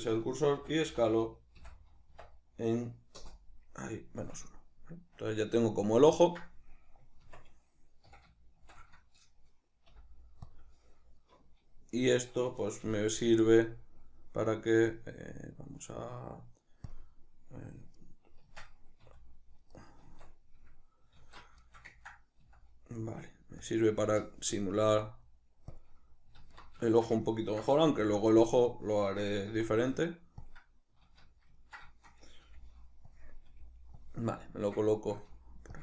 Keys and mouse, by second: 0.6 s, 3.3 Return, 4.3 Tab, 4.6 middle click, 7.3 Tab, 8.1 a, 8.6-19.9 middle drag, 8.6 shift+n, 9.9 ., 12.8 ., 18.5 Tab, 19.0 s, 19.9 right click, 20.1 Tab, 21.2 alt+q, 21.7-23.8 ctrl+shift+middle drag, 22.5 s, 23.8 click, 24.1 g, 24.7 click, 24.9 s, 25.9 click, 26.5 alt+q, 26.9-28.5 shift+middle drag, 28.0 g, 28.5 click, 28.7-30.5 ctrl+middle drag, 29.5 s, 30.5 click, 31.1 alt+q, 31.6-33.2 ctrl+middle drag, 32.5 g, 33.2 click, 33.5 g, 34.1 click, 34.5-35.8 ctrl+middle drag, 35.3 g.